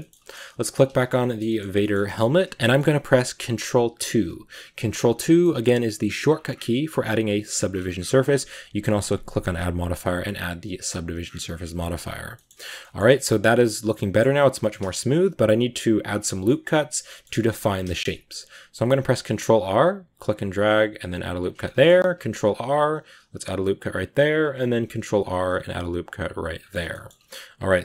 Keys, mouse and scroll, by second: 0.5 right drag, 0.8-1.4 shift+middle drag, 1.4 scroll up 2, 1.7-3.9 shift+middle drag, 3.9 ctrl+2, 4.9 scroll up 1, 5.1-8.9 middle drag, 9.4 middle click, 10.7-12.5 middle drag, 12.5 scroll up 2, 12.7-15.6 shift+middle drag, 15.6 Tab, 16.3-18.7 middle drag, 18.7 ctrl+r, 21.5 shift+middle click, 22.0 ctrl+r, 24.4 scroll up 2, 24.7 ctrl+r, 26.6 scroll down 2, 26.8 middle click, 27.1 Tab, 27.1-27.8 middle drag.